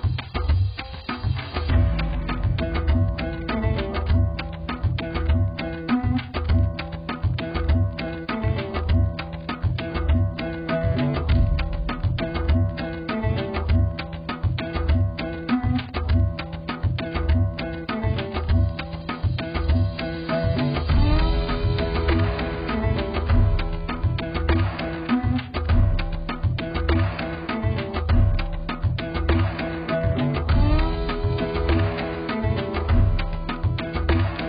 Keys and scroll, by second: 6.5 ctrl+0.